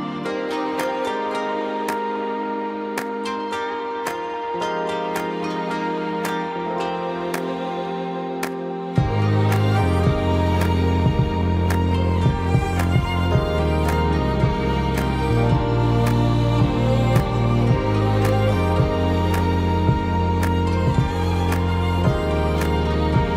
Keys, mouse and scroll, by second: 5.6 shift+click, 5.8 shift+space, 6.5 space, 9.5 shift+e, 15.1 space, 18.3 alt+t.